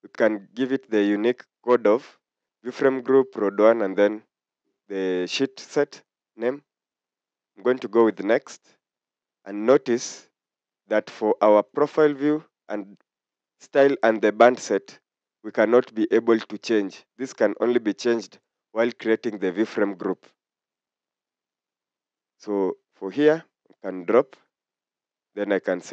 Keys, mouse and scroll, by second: 8.1 click.